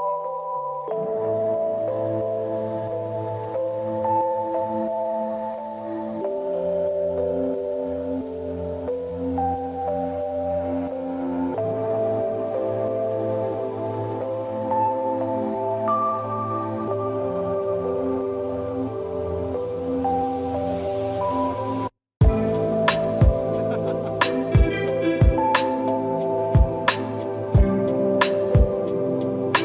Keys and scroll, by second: 7.1 ctrl+-, 7.3 ctrl+=, 7.5 ctrl+-, 8.0 space, 23.5 space, 28.7 space.